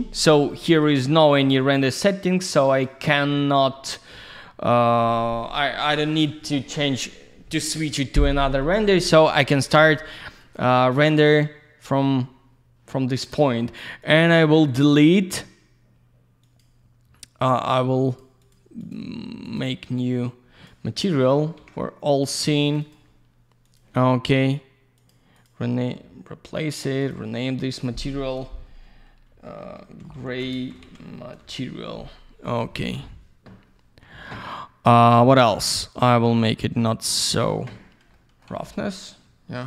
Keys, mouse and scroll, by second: 0.7 click, 0.8 click, 1.6 click, 1.7 click, 2.7 click, 2.8 click, 10.4 click, 13.1 middle click, 14.0 click, 14.7 right click, 16.4 click, 16.6 click, 18.0 click, 18.2 click, 18.4 click, 18.5 click, 18.8 click, 18.9 double click, 19.4 click, 19.6 click, 20.0 click, 21.2 middle click, 21.4 middle click, 21.6 ctrl+a, 22.1 click, 22.2 click, 22.7 click, 22.7 double click, 22.8 click, 22.9 click, 23.6 click, 23.8 click, 25.0 click, 25.1 click, 25.4 click, 25.4 double click, 26.6 click, 26.7 click, 27.0 click, 27.1 double click, 27.6 click, 29.3 shift+g, 30.4 space, 30.7 shift+m, 31.4 t, 31.6 Return, 32.8 w, 35.7 click, 38.1 alt+middle click, 38.5 alt+z, 38.6 click, 38.7 click, 38.8 middle click.